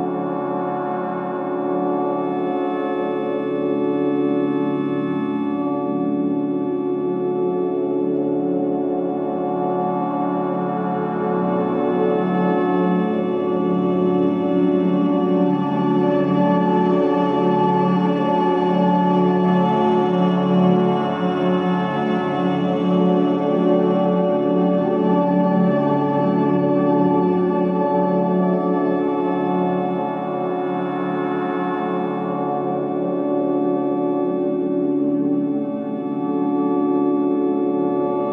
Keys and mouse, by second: 0.3 middle click, 3.0-4.4 shift+drag, 5.0 click, 6.2 shift+click, 7.4 middle click, 9.0 shift+middle click, 19.2 middle click, 21.3 ctrl+r, 25.5 ctrl+r, 29.1 ctrl+r, 33.4 Tab, 34.4 middle click, 36.2 click, 36.8-37.5 drag, 37.5 Tab, 38.0 Tab, 38.2-38.3 middle drag.